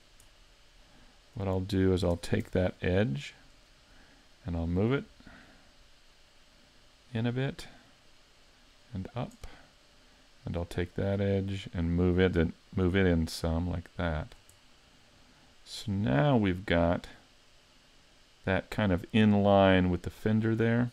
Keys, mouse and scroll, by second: 0.3 middle click, 1.9 middle click, 2.2 ctrl+Tab, 2.7 middle click, 3.6 right click, 4.0 middle click, 5.5 click, 8.1 click, 9.5 middle click, 10.5 right click, 10.8 middle click, 13.0 click, 14.6 middle click.